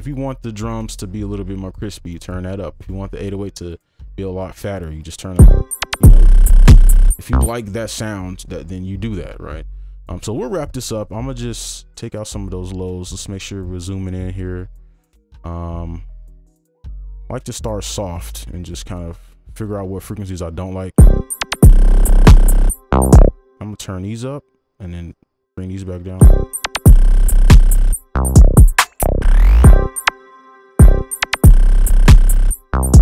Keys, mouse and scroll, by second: 5.3 space, 7.4 space, 15.4 |, 17.3 double click, 20.9 space, 21.6 double click, 23.3 space, 25.1 double click, 26.2 space, 30.1 space, 30.8 space, 31.6 double click.